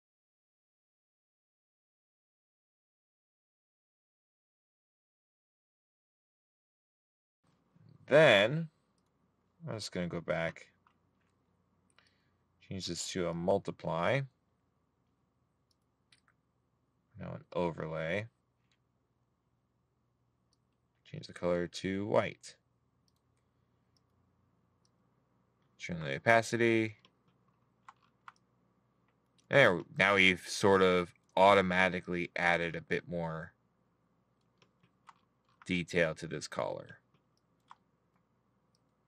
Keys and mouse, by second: 0.5 middle click, 4.7 right click, 7.2 middle click.